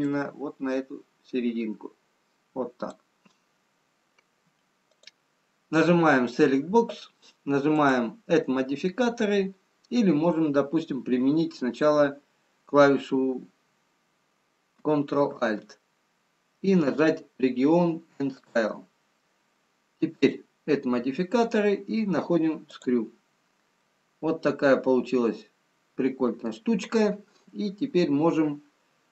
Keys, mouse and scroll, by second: 0.7 click, 4.9 click, 7.8 click, 20.2 click, 23.8 middle click.